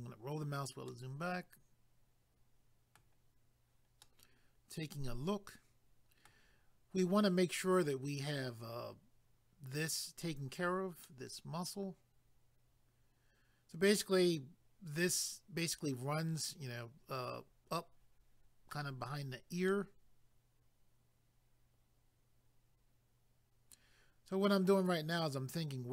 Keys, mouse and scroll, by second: 0.9 middle click, 4.0 middle click, 11.0 middle click, 19.7 middle click.